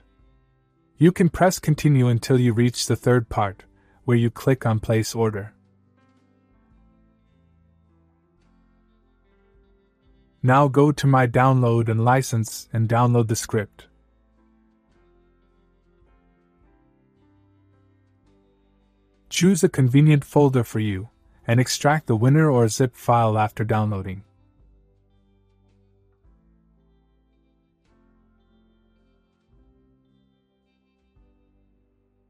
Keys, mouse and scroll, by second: 1.2 click, 5.6 click, 11.6 click, 15.7 click, 17.8 click, 22.4 click, 23.6 click, 26.0 click, 27.0 click, 28.8-29.5 click, 31.6 right click.